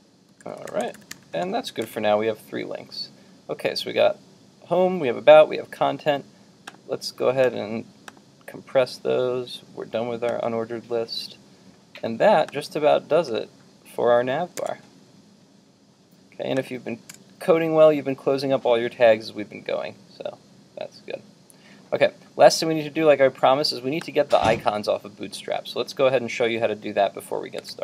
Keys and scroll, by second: 1.9 super+Tab, 14.6 super+Tab, 27.6 super+Tab.